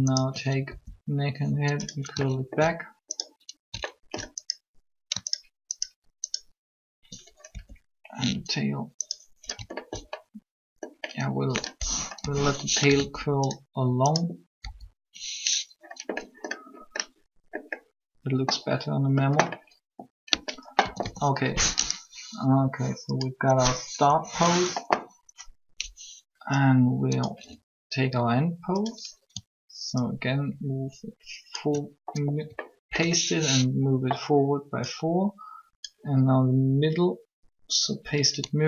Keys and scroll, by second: 0.6 shift+r, 7.5 shift+r, 12.1 7, 12.9 r, 14.7 r, 20.8 a, 20.9 a, 23.8 3.